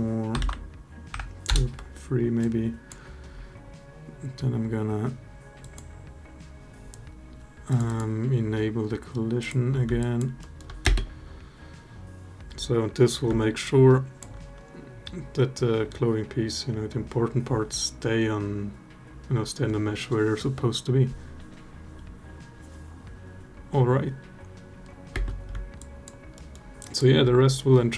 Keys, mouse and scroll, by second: 2.2-2.7 drag, 5.4 click, 7.6 click, 9.2 click, 9.7 alt+drag, 10.1 alt+middle drag, 10.6 space, 13.7 alt+click, 25.1 space, 25.6 alt+drag, 26.1 alt+middle drag, 26.6 alt+drag.